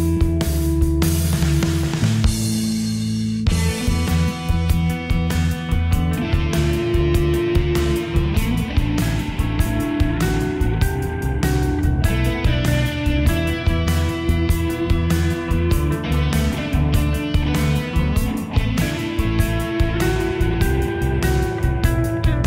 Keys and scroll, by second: 6.2 ctrl+t.